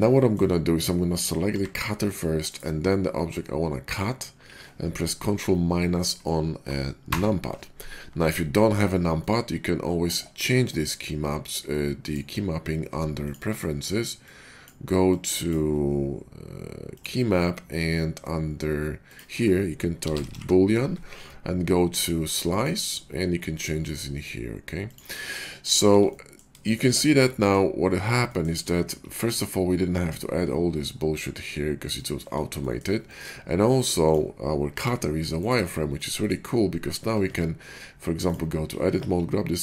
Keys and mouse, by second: 1.4 g, 3.8 shift+click, 3.9-12.0 shift+middle drag, 7.0 ctrl+KP_Subtract, 14.7-34.6 middle drag, 34.6 g, 37.1 Tab, 38.9 ctrl+b.